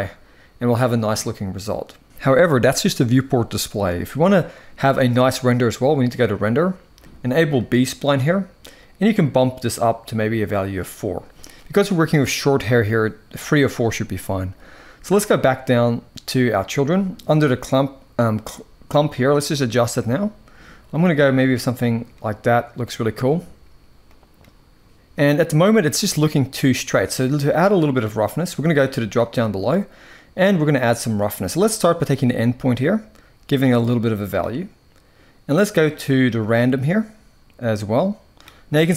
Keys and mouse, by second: 5.8 click, 7.3 click, 19.1 click, 21.4 click, 23.8-24.1 drag, 29.0 click, 32.0-33.8 drag, 36.2-38.0 drag.